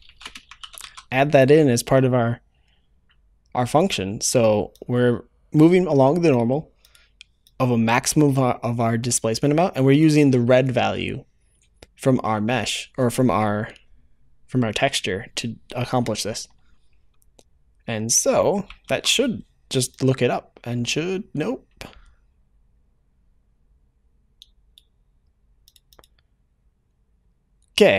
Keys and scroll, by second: 0.7 ctrl+s.